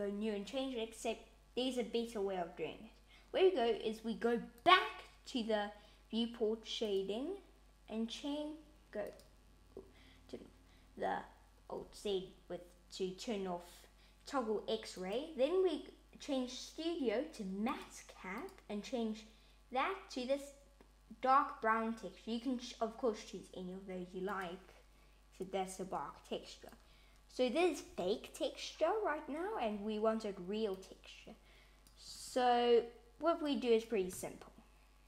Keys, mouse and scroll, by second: 5.7 click, 8.0 click, 9.2 click, 14.9 click, 26.6 click, 30.7 click, 32.0 click, 33.3 click.